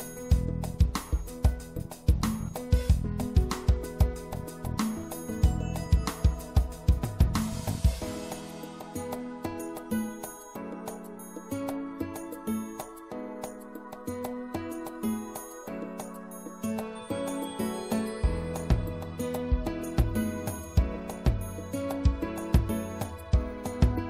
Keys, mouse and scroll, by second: 11.9-14.4 drag, 11.9 c.